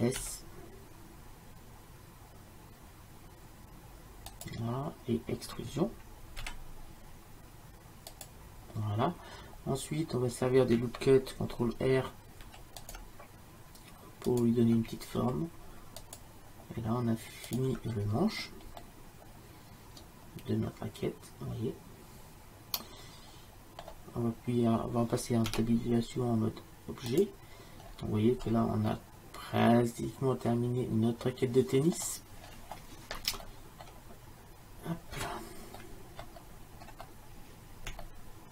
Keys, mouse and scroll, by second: 0.3 s, 6.5 e, 9.6 middle click, 12.5 ctrl+r, 15.2 ctrl+r, 18.0 middle click, 18.9-20.7 middle drag, 25.6 Tab, 27.9-29.7 middle drag, 31.0-32.5 middle drag, 33.4 Tab.